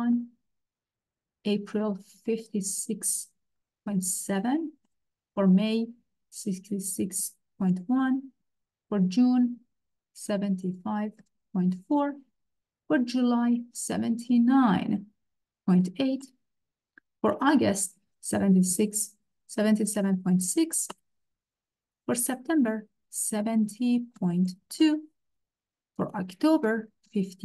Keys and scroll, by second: 0.0-0.3 typing, 2.0-3.9 typing, 4.8 Return, 6.2 6, 6.4 6, 7.2 ., 7.6 1, 8.0 Return, 9.9 7, 10.3 5, 11.2 ., 11.6 4, 11.9 Return, 13.7 7, 14.3 9, 15.5 ., 15.8 8, 16.2 Return, 17.9-20.0 typing, 20.9 Return, 23.2-24.5 typing, 24.8 Return, 26.7 5, 27.0 8.